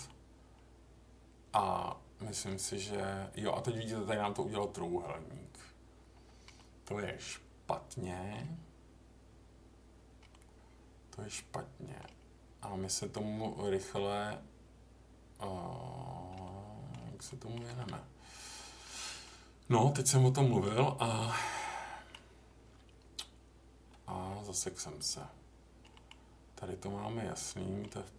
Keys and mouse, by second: 0.0-1.5 middle drag, 1.8 middle click, 6.5-8.3 middle drag, 10.3-12.0 middle drag, 16.4 middle click, 17.2 middle click, 19.2-20.6 middle drag, 21.6 middle click, 25.9 middle click, 27.4 middle click.